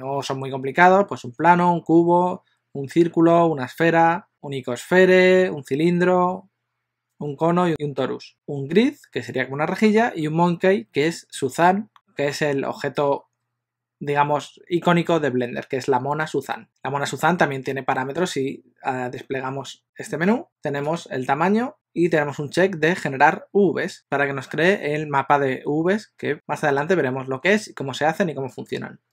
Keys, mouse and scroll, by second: 21.1 click.